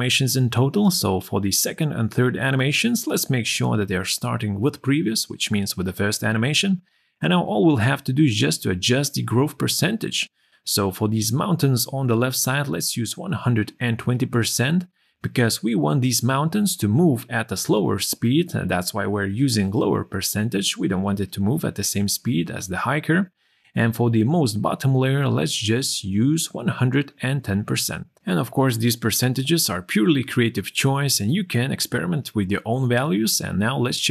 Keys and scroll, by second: 12.7 2, 26.9 1.